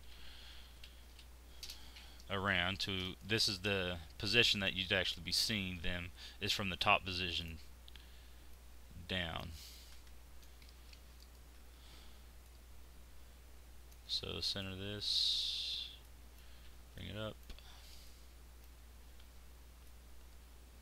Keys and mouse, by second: 2.8 z, 3.8 z, 11.2-12.4 middle drag, 14.0 z, 16.5 z, 18.2 click, 19.3 ctrl+z.